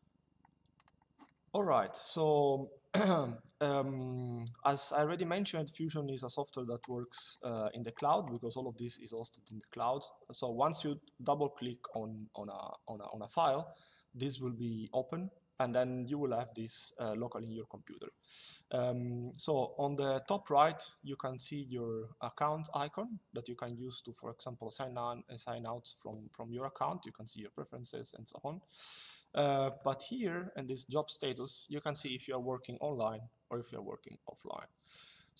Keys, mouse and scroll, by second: 0.5 click, 21.0 click, 29.4 click.